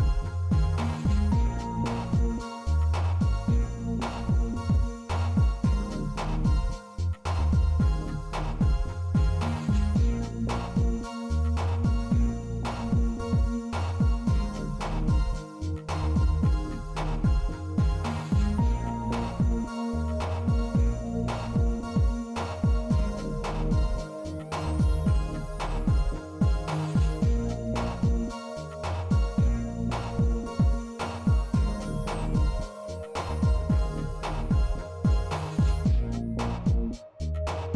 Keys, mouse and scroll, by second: 0.0-1.9 middle drag, 1.9 shift+middle click, 2.5-3.4 middle drag, 5.4-6.4 drag, 7.3 middle drag, 7.8 Tab, 8.7 middle click, 9.8 3, 10.5 click, 11.9 click, 12.9 click, 13.7 middle click, 14.2 shift+middle click, 18.8 z, 21.8-24.6 drag, 25.2 shift+middle click, 26.4-27.4 shift+middle drag, 29.5 Tab, 30.6 z, 31.5-32.3 middle drag, 35.4-36.9 drag, 37.5-37.7 middle drag.